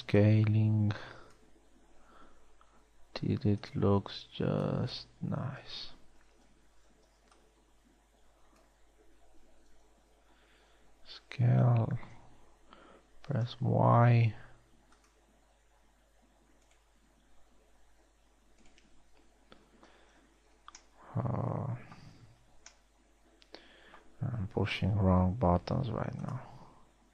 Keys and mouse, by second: 0.5 b, 3.3 s, 4.5 a, 5.3 n, 6.0 n, 7.8 b, 11.1 s, 16.3 s, 18.8 s, 20.3 Tab, 21.1 z, 25.7 t.